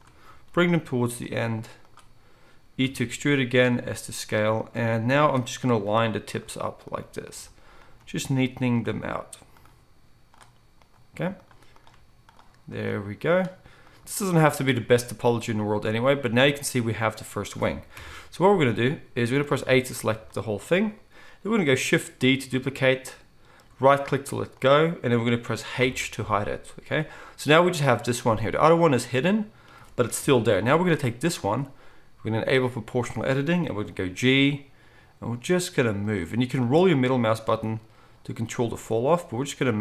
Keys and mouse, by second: 0.5 g, 2.8 e, 3.7 s, 5.8 g, 6.9 click, 7.0-39.8 middle drag, 7.0 g, 8.8 g, 11.1 g, 12.9 g, 17.9 KP_1, 19.6 a, 22.2 shift+d, 25.8 h, 30.2 KP_1, 34.0 g, 37.4 g.